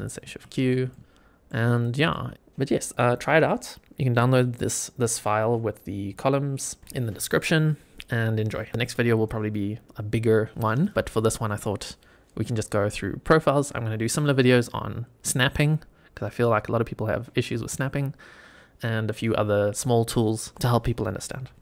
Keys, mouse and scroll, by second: 0.2 shift+q, 0.8-1.4 middle drag, 1.7 click, 2.0-2.3 middle drag, 2.3 scroll down 1, 5.5-6.0 scroll down 3, 6.1-6.7 shift+middle drag.